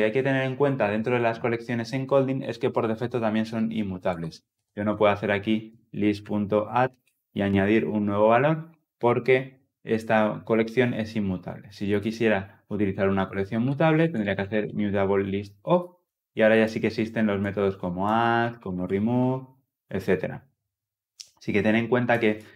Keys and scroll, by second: 15.2 Tab.